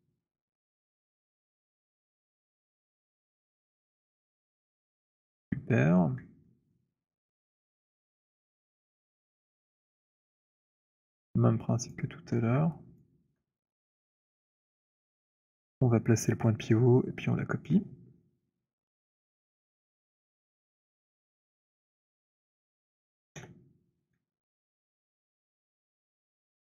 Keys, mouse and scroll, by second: 0.2 middle click, 1.8 alt+middle click, 2.6-4.8 c, 5.0 middle click, 5.0 c, 5.2 middle click, 5.4 middle click, 5.7 middle click, 5.9-6.3 scroll, 6.5 alt+scroll, 7.4 alt+right click, 9.7 right click, 10.1 click, 11.8 click, 12.9 alt+click, 14.3 Insert, 18.4-21.9 v, 22.3 v, 22.5 click, 22.5 v, 22.7 v, 26.1 alt+click.